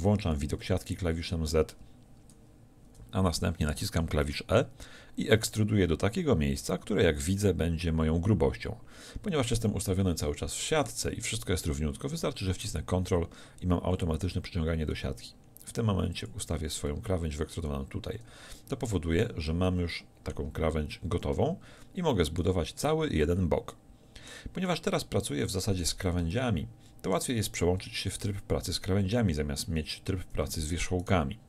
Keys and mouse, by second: 5.4 e, 20.6 z, 30.4 z.